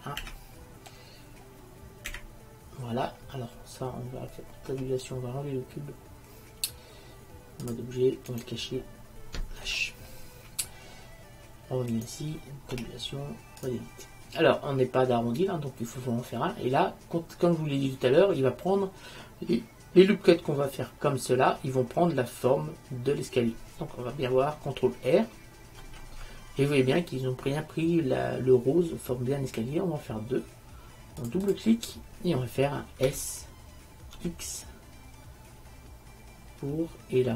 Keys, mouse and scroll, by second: 0.4 KP_1, 4.8 Tab, 8.5-9.8 right drag, 9.8 h, 12.9 Tab, 16.5-18.4 middle drag, 25.9 ctrl+r, 33.2 s.